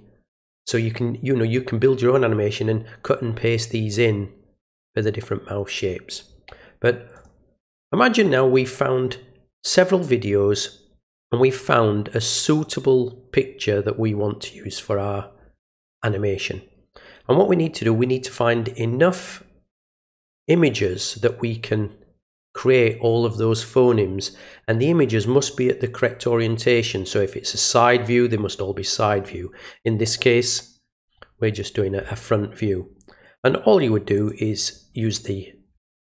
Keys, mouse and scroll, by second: 7.1 click, 34.1 click.